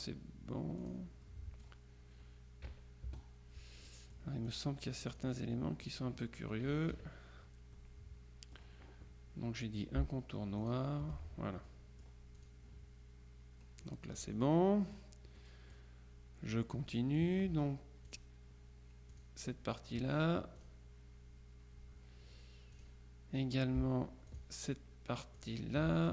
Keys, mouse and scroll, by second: 0.9 click, 2.7 KP_Subtract, 3.1 KP_Add, 3.9-5.1 drag, 6.7 KP_Subtract, 7.8-9.2 drag, 10.7 shift+click, 11.8-13.0 drag, 13.9-14.8 drag, 14.9 click, 17.0 click, 18.2 click, 19.2 click, 20.6 click, 22.8 click, 24.4 shift+click, 25.4 click.